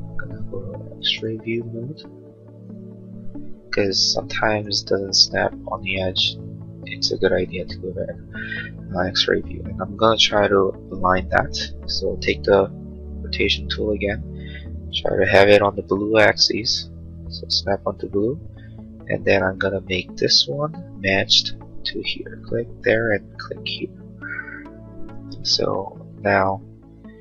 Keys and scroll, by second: 12.6 q, 13.5 q.